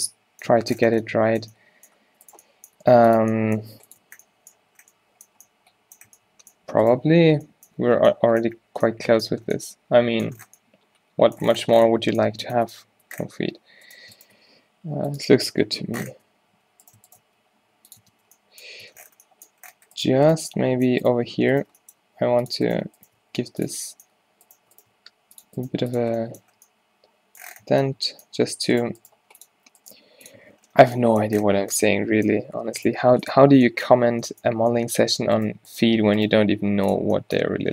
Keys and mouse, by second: 0.6 Tab, 2.9 g, 3.8 g, 4.4 Tab, 6.2 Tab, 7.2 q, 7.9 Tab, 9.4 a, 13.0 Tab, 13.5 z, 14.6 g, 15.3 z, 15.5 Tab, 16.2 Tab, 16.6 z, 17.3 g, 18.1 Tab, 18.3 z, 19.0 Tab, 22.1 g, 23.3 g, 25.0 g, 25.8 g, 26.1 Tab, 28.0 Tab, 30.0 g, 30.5 Tab, 32.8 Tab, 33.1 g, 36.6 click, 36.6 g.